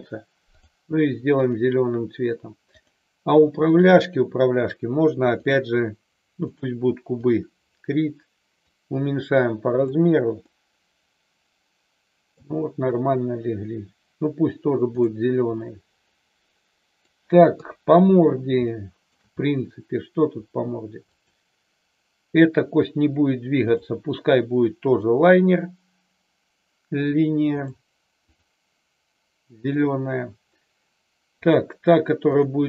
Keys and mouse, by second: 0.6 click, 2.7 click, 3.7 shift+click, 5.5-6.6 drag, 8.6-9.7 drag, 10.5-12.5 middle drag, 15.5-17.1 middle drag, 17.5 KP_3, 18.6 shift+middle click, 21.1 click, 23.6-27.7 drag, 28.2 click, 29.5 click, 31.3 click, 32.3-32.6 drag.